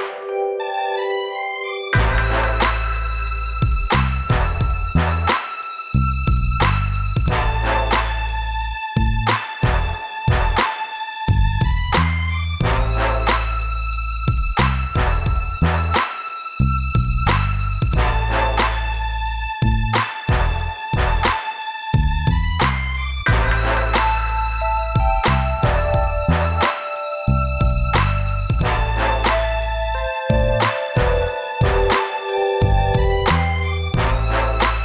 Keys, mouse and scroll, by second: 1.9 click, 2.9 scroll up 1, 3.7 click, 8.4 click, 8.5 click, 9.9 click, 10.0 click, 10.4 scroll down 2, 11.9 middle click, 13.0 scroll up 1, 14.9 click, 15.0 click, 15.7 scroll up 2, 18.2 click, 22.2 click, 22.3 click, 23.0 click, 23.2 click, 23.7 scroll down 2, 25.1 p, 28.7-29.0 scroll up 2, 30.6 click, 30.7 click.